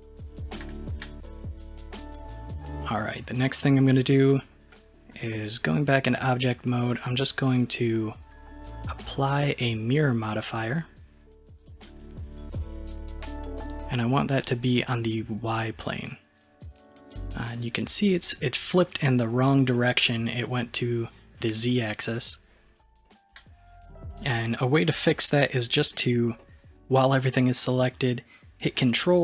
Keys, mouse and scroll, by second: 4.7-6.9 middle drag, 6.9 click, 9.5 click, 14.4 click, 15.5 click, 21.4 click, 23.1-25.9 middle drag, 26.4 middle click.